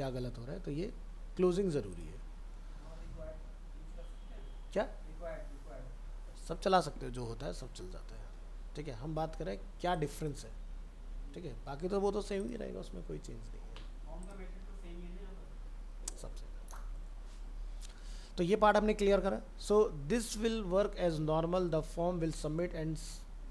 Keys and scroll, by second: 2.8 ctrl+s, 13.2 alt+Tab.